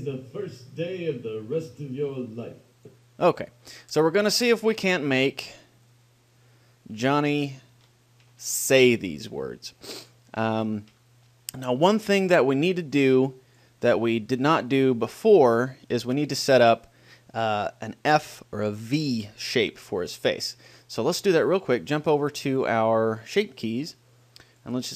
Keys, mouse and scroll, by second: 3.1-5.6 drag, 6.3-8.0 drag, 8.2-11.6 middle drag, 12.7-14.4 drag, 14.7 middle click, 15.9-20.3 middle drag, 16.2-20.3 drag, 24.7-24.9 drag.